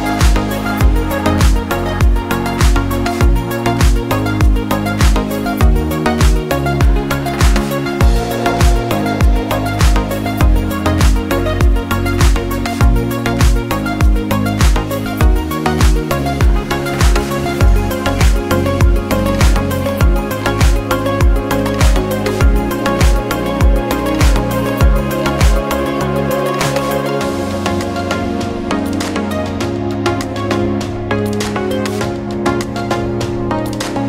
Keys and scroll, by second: 16.8 ctrl+0.